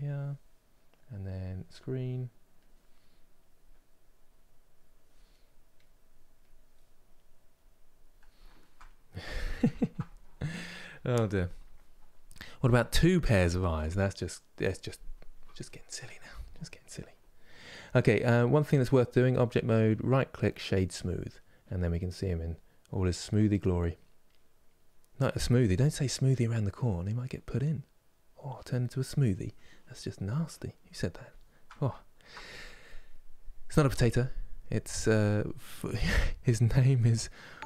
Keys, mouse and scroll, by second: 6.9-8.1 drag, 8.1-18.9 ctrl+middle drag, 18.9-20.4 drag, 20.4 right click, 21.0-24.1 middle drag, 29.8-37.6 middle drag.